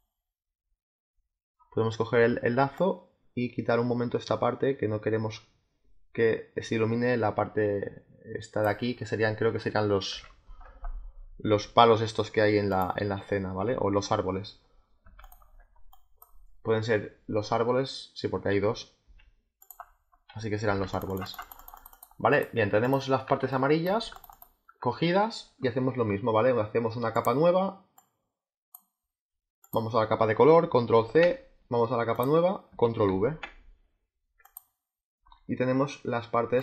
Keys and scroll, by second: 10.0 z, 19.7 space, 20.6 z, 23.3 space, 30.8 ctrl+c, 33.0 ctrl+v.